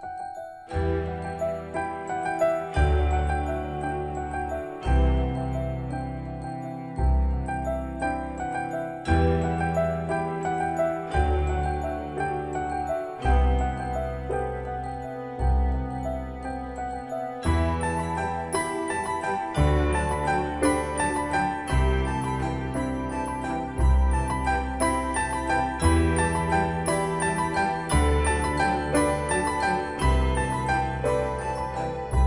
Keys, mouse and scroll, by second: 0.6 m, 1.3 m, 1.6 scroll up 1, 2.6 click, 3.0-3.4 scroll up 1, 4.9 scroll up 1, 4.9 click, 5.4-5.8 scroll down 1, 6.8-7.6 scroll up 1, 7.6 scroll down 1, 8.4-10.0 typing, 11.9 typing, 12.0 scroll up 1, 14.2 click, 14.9 scroll down 1, 16.5 middle click, 17.4 scroll down 1, 19.6-20.2 typing, 20.4 scroll up 1, 21.9 click, 24.1-24.9 typing, 25.4 Return, 27.3 middle click, 27.8 scroll up 1, 29.1-29.6 typing, 31.2-32.2 drag.